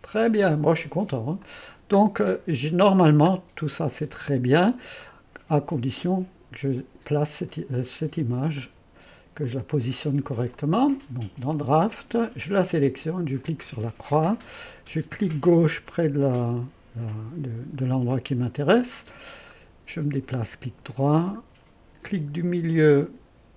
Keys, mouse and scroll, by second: 2.0 middle click, 2.2-5.0 scroll down 2, 5.0-6.9 drag, 6.9-7.6 scroll down 1, 8.5-12.5 drag, 13.4-17.5 drag, 17.8-19.0 scroll up 1, 19.5-20.8 drag.